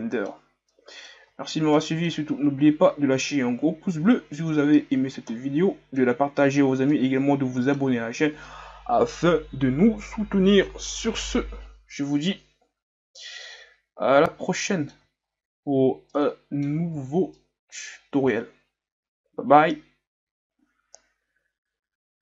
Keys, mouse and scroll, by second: 1.3-1.7 shift+scroll up 4, 1.7-2.5 middle drag, 2.5 scroll up 1, 3.3 scroll up 1, 5.2-6.3 middle drag, 6.3-6.6 scroll down 2, 6.9-14.2 middle drag, 14.2 alt+a, 14.8-15.2 middle drag, 15.2-16.1 shift+scroll up 10, 16.1-16.9 middle drag, 16.9 ctrl+scroll up 1, 17.3 middle click, 17.8-18.2 scroll up 2, 18.6-22.2 shift+scroll up 4.